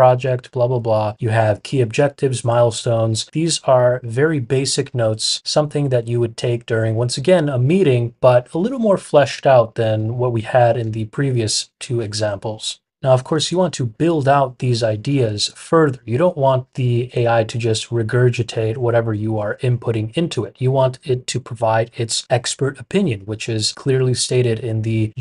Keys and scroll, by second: 20.3 typing.